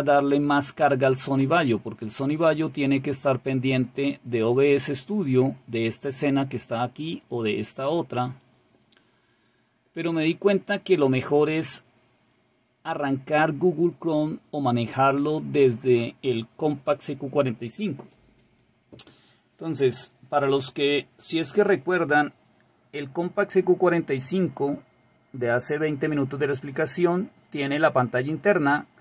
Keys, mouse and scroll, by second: 3.6 click, 6.7 click, 8.3 click.